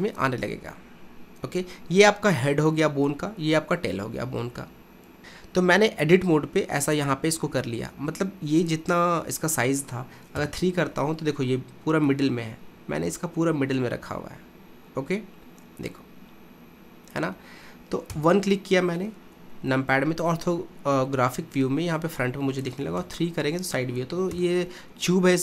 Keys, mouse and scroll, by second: 7.0 click, 10.4 KP_3, 12.9-15.4 middle drag, 18.2 KP_1, 23.0 KP_3, 24.3 KP_1.